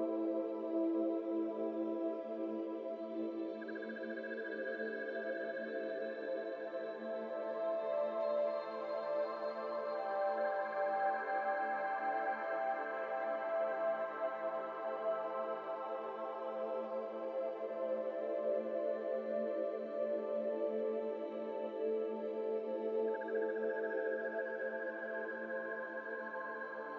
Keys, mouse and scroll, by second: 0.0 alt+z, 0.3 g, 1.3 z, 1.3 z, 1.4 z, 1.6 middle click, 1.9 alt+z, 2.1 shift+middle click, 2.7 alt+z, 3.2 2, 4.3 1, 4.6 alt+z, 5.3 alt+shift+click, 5.9 ctrl+z, 6.2 alt+shift+click, 6.9 ctrl+z, 7.2 alt+shift+click, 7.6 alt+shift+click, 7.9 alt+shift+click, 8.5-9.1 scroll up 2, 9.1 alt+z, 9.6 shift+click, 10.0 alt+z, 11.0 s, 13.4 s, 15.0 3, 15.1 click, 15.6 middle click, 16.9 e, 17.8-18.4 scroll down 4, 17.9 middle click, 18.3 alt+z, 18.4 middle click, 18.8 alt+z, 18.9-19.5 scroll down 4, 19.0 middle click, 19.3 Tab, 19.5-19.8 middle drag, 19.8 click, 20.1-20.4 middle drag, 20.4 click, 20.6 middle click, 20.7-21.9 scroll up 6, 21.1 Tab, 21.3 middle click, 22.0 2, 22.3 alt+click, 23.3 shift+d, 24.2 KP_1, 24.6 alt+z, 25.0 shift+middle click, 25.1-25.6 scroll up 5, 25.6 g.